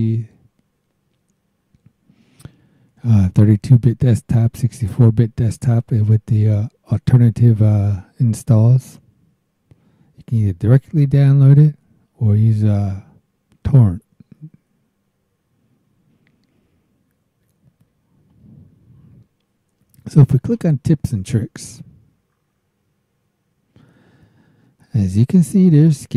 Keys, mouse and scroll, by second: 16.7 scroll down 1, 17.1-17.5 scroll up 1, 17.8 scroll up 1, 18.3-18.6 scroll up 1, 20.2 click.